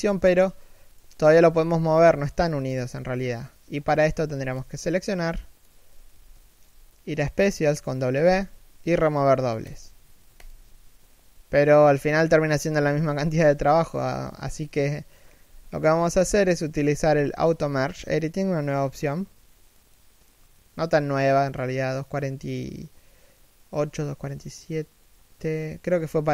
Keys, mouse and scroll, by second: 0.0 g, 1.7 right click, 1.8 g, 3.0-3.3 scroll down 1, 3.7 a, 4.0 b, 6.0 middle click, 7.9 w, 14.3 middle click, 15.1 a, 16.0 right click.